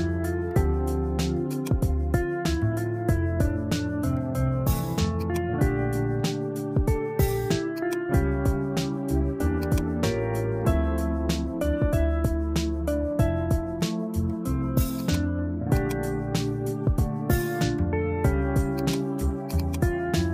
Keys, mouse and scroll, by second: 1.5-4.2 drag, 5.2 click, 7.8-9.8 drag, 11.2-13.8 drag, 15.0 click, 15.7-18.4 drag, 18.8 click, 19.5-20.3 drag.